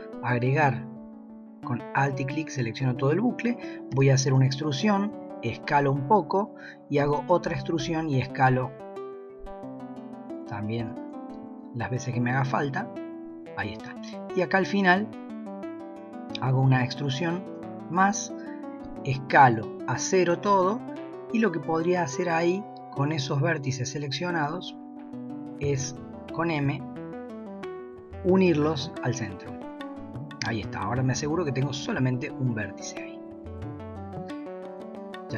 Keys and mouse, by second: 0.4 alt+click, 3.9 e, 5.1 s, 7.5 s, 10.8 e, 11.3 s, 13.9 click, 16.7 e, 18.8 s, 25.8 m, 30.8 click, 31.8 g, 33.6 middle click.